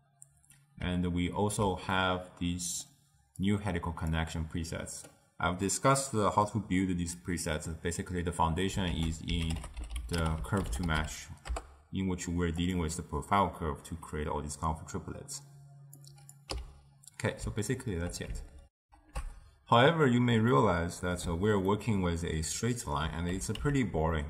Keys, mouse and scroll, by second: 2.0-3.5 middle drag, 3.5 click, 9.0 ctrl+a, 16.1-16.6 drag, 16.6 x, 17.8 ctrl+middle click, 18.7 ctrl+alt+shift+w, 19.9 ctrl+alt+shift+q, 20.5-23.3 middle drag, 23.3 g.